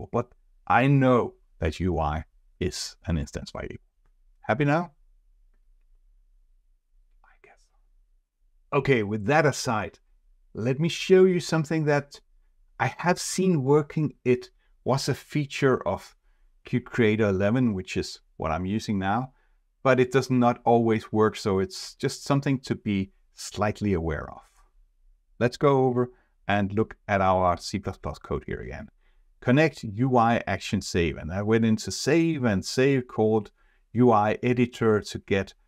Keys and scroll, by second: 27.0 F4.